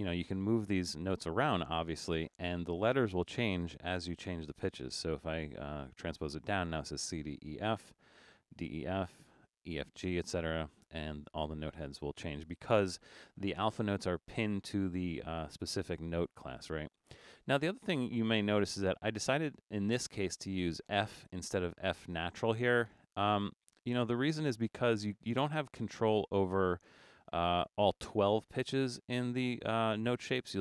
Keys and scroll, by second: 4.5 typing, 7.9 7, 8.9 typing, 10.2-11.4 typing.